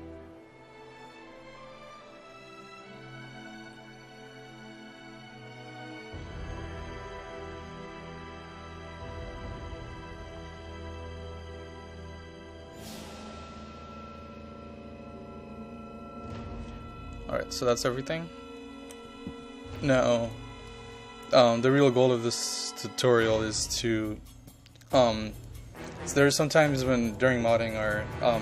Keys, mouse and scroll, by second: 0.0 typing, 1.1 Down, 1.7-5.7 typing, 7.6 Up, 8.1 typing, 9.5 Down, 11.3-12.9 typing, 14.0 Down, 14.9-17.9 typing, 20.4-28.2 drag.